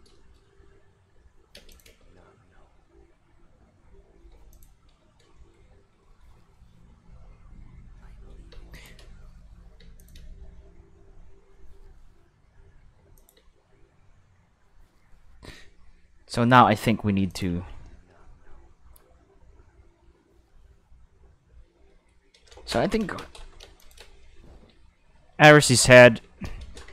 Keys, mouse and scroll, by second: 0.2 shift+middle click, 0.5 middle click, 1.5 space, 1.7 click, 1.8 space, 4.3 space, 4.5 click, 4.7 space, 5.4 shift+middle click, 6.0 shift+middle drag, 7.9 middle click, 8.5 space, 8.7 click, 9.0 space, 9.8 space, 10.0 click, 10.1 space, 13.0 space, 13.1 click, 13.3 space, 15.2 space, 16.4 middle click, 16.8 middle click, 17.3 click, 17.5 space, 21.4 space, 21.9-22.3 middle drag, 22.1 scroll down 2, 23.2 space, 23.6 space, 23.8 click, 24.0 space, 25.2 q, 26.0 middle click, 26.1 q, 26.4 space.